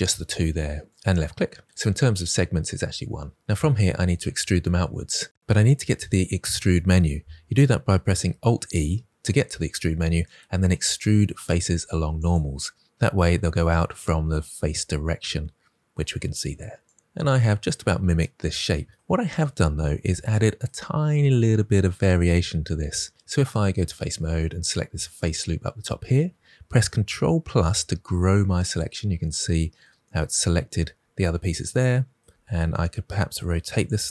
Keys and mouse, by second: 8.4 alt+e, 16.8 click, 23.1 ctrl+z, 24.0 click, 28.8 KP_Add, 32.3 r, 33.7 click.